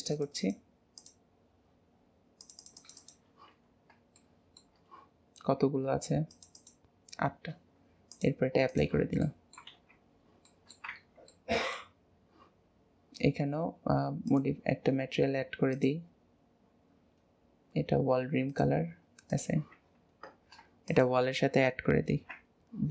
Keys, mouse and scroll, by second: 3.7 scroll down 2, 3.9 scroll up 1, 4.1-6.3 shift+middle drag, 6.3-9.2 drag, 9.2 middle click, 9.7 alt+z, 10.0-10.5 scroll down 3, 10.5-10.9 shift+middle drag, 10.9 Tab, 11.3 middle click, 11.9-13.2 scroll down 2, 13.2-14.3 scroll up 2, 14.3 click, 15.3-15.7 scroll up 1, 15.7-18.7 drag, 19.3 click, 19.8 Tab, 20.3-20.9 scroll down 1, 20.9 shift+click, 22.0 ctrl+j, 22.4-22.9 scroll down 1.